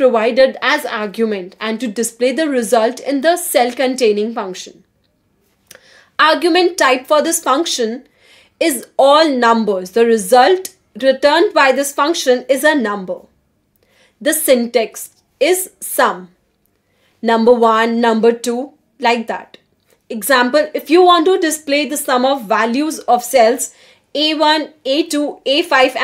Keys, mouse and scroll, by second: 0.9-1.8 typing, 23.7 click, 24.0-26.0 typing.